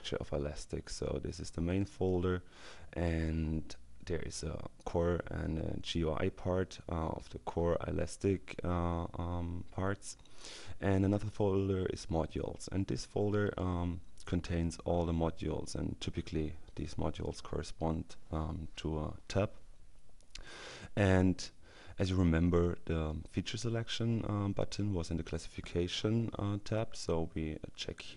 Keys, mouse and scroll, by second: 1.0-2.3 drag, 12.6-13.8 drag.